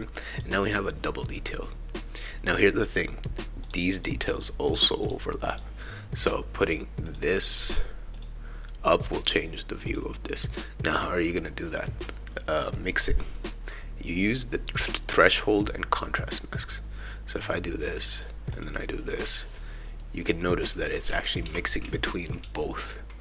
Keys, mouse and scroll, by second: 0.3 click, 3.6 click, 4.0 click, 4.3 click, 4.6 click, 5.1 click, 5.5 click, 7.1 click, 8.1 click, 9.9 click, 16.6 click, 18.1 click, 18.6 click, 20.0-23.2 right drag, 20.8-22.4 typing.